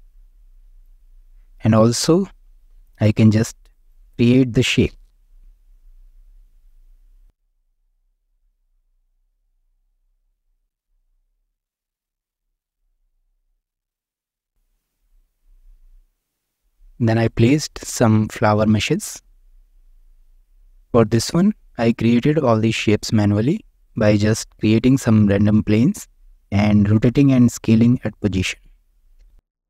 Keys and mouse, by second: 0.0 click, 1.4 Tab, 2.0 shift+middle click, 2.7 alt+z, 3.7 click, 5.3 g, 5.8 click, 6.4 3, 6.5 click, 7.2 click, 8.7 e, 9.2 click, 9.5 click, 10.1 e, 11.0 s, 11.4 click, 12.0 e, 12.4 click, 12.9 s, 13.4 click, 13.6 Tab, 14.2-14.5 middle drag, 14.7 shift+middle click, 16.5-16.9 middle drag, 17.3-17.7 middle drag, 17.8 click, 18.3-18.6 middle drag, 19.6-20.0 middle drag, 20.7 shift+middle drag, 21.1 Tab, 21.6 middle click, 22.5 shift+click, 23.5 Tab, 23.7 click, 24.0 click, 24.4 Tab, 24.8 shift+middle click, 25.3-26.3 middle drag, 26.6 shift+middle click, 27.6 middle click, 27.8 click, 27.8 middle click, 28.3-28.7 shift+middle drag, 29.0-29.5 middle drag.